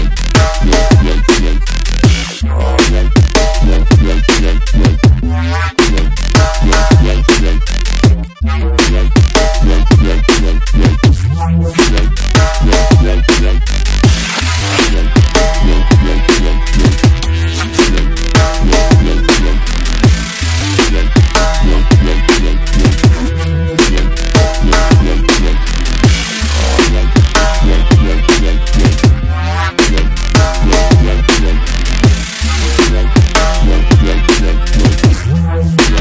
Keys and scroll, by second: 1.2 alt+shift+Left, 10.0 alt+shift+Left, 29.5 ctrl+g, 34.5 ctrl+u.